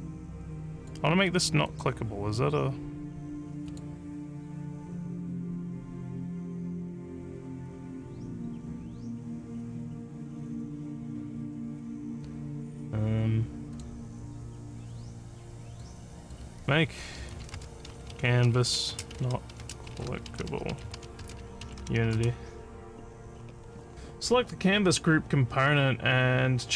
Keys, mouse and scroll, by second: 0.8 click, 1.3 click, 1.7 click, 3.7 click, 13.7 click, 15.7 click, 16.2 click, 17.0-19.6 typing, 20.6 a, 21.0 e.